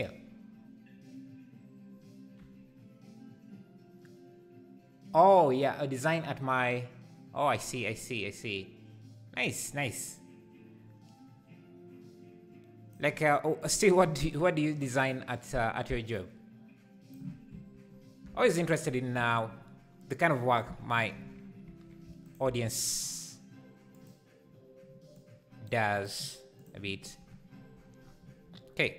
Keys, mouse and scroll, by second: 16.1 click, 22.3 shift+right click, 22.4 shift+a.